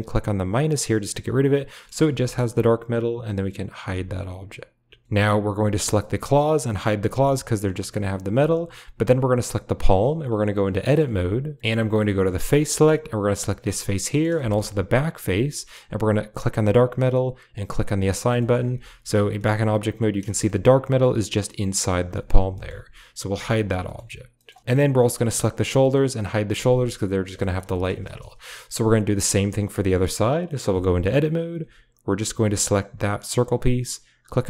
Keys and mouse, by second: 0.3 click, 1.7 middle drag, 1.9 shift+middle click, 3.7 h, 5.9 click, 7.1 h, 7.6 click, 8.2 h, 9.2 click, 10.8 middle click, 11.0 Tab, 12.5 click, 13.7 middle click, 14.8 shift+click, 15.5 middle click, 17.6 click, 18.1 shift+middle click, 18.7 Tab, 19.4 middle drag, 20.3 shift+click, 22.1 shift+click, 22.5 shift+click, 23.2 h, 23.5 shift+middle click, 24.6 middle drag, 25.3 drag, 26.4 h, 27.4 shift+middle drag, 27.7 shift+middle drag, 29.2 click, 29.8 middle click, 30.6 Tab, 32.2 l, 34.2-34.4 drag.